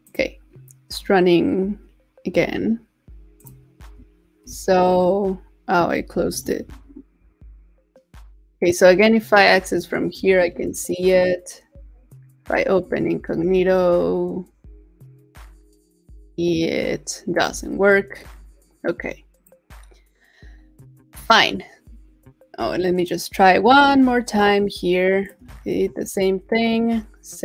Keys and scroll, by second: 6.3 super+t, 6.7 super+v, 10.4 super+w, 13.3 super+v, 17.9 super+w, 25.5 super+a, 25.7 super+v.